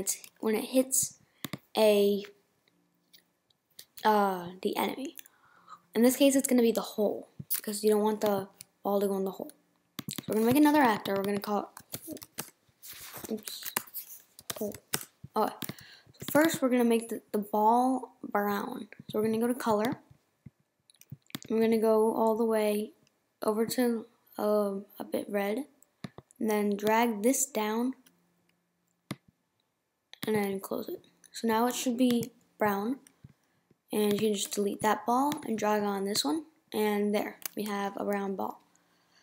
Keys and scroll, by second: 34.5 BackSpace.